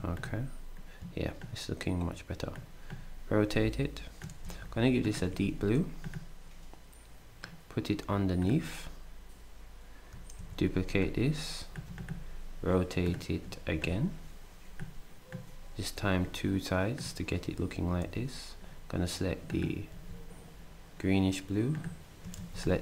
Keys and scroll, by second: 4.4 d, 5.3 s, 10.4 ctrl+d, 18.0 d, 19.9 s, 22.6 d.